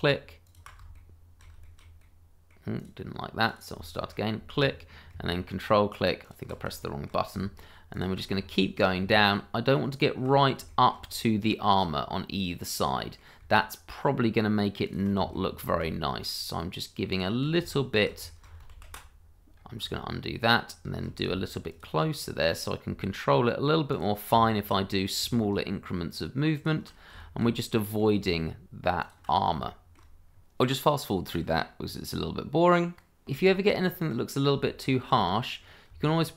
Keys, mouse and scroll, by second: 0.4 alt+click, 0.6 click, 0.9 shift+middle click, 1.7 middle click, 3.5 click, 3.9 middle click, 4.1 shift+middle click, 4.1-5.1 scroll up 1, 6.2 click, 6.8 shift+middle click, 6.9 middle click, 7.9 click, 8.5 shift+middle click, 9.9 click, 10.7 shift+middle click, 10.7 middle click, 11.8-12.5 scroll down 1, 12.5 scroll up 1, 12.9 middle click, 14.8 ctrl+click, 15.2 click, 15.3 shift+middle click, 15.4 middle click, 15.5 shift+middle click, 17.1 ctrl+click, 17.7 shift+middle click, 17.8 middle click, 17.9 shift+middle click, 18.7 ctrl+z, 19.5 ctrl+z, 19.6 scroll up 1, 21.7 ctrl+click, 21.8 click, 23.9 ctrl+click, 24.4 shift+middle click, 24.5 middle click, 24.6 shift+middle click, 26.5 ctrl+click, 27.2 shift+middle click, 27.2 middle click, 29.0 click, 29.6 shift+middle click, 29.7 middle click, 29.8 shift+middle click, 30.3 scroll down 1, 30.4 shift+middle click, 30.8 scroll up 1, 31.0 ctrl+z, 31.0 scroll down 1, 31.1 ctrl+click, 31.2 shift+middle click, 31.4 shift+middle click, 31.5 middle click, 31.6 click, 31.6-32.5 scroll down 3, 31.8 ctrl+click, 32.1 shift+middle click, 32.5 click, 32.6 ctrl+z, 32.7 shift+middle click, 32.8 click, 33.0 shift+middle click, 33.4-33.8 shift+scroll up 2, 34.1 middle click, 34.6 shift+middle click, 34.7 middle click, 34.8 shift+middle click, 35.1-35.5 shift+scroll up 2.